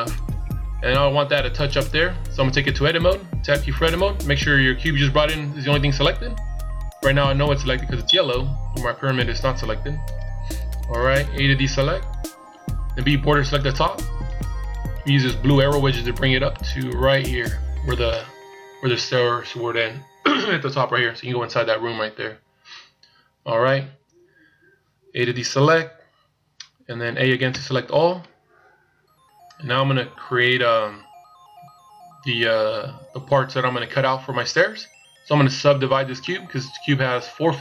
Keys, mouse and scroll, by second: 2.1-2.6 scroll down 1, 9.6 Tab, 11.6 a, 12.6 b, 15.2 click, 24.6 a, 27.0 a, 35.8 middle click.